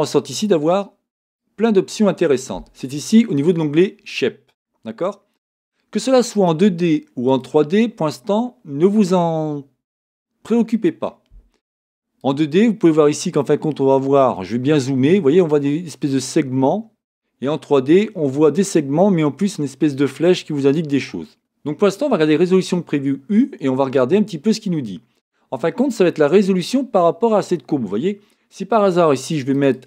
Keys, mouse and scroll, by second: 1.3 click, 6.3 click, 12.2 click, 14.3-14.6 scroll up 1, 17.9 click.